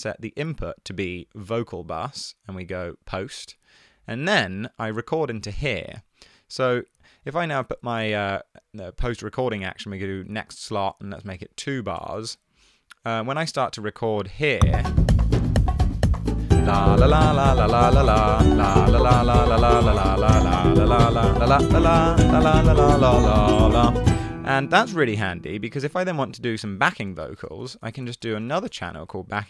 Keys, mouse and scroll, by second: 11.3 2, 12.0 ], 12.0 BackSpace, 12.1 Return, 18.9 e, 26.3 super+d, 27.2 super+r, 27.5-28.6 typing, 28.7 Return.